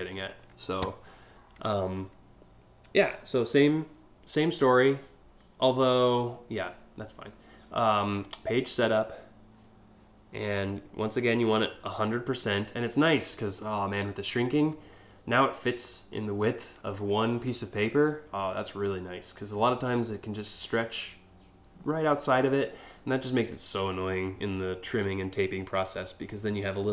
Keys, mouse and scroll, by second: 2.6 scroll up 2, 4.2 click, 7.8 click.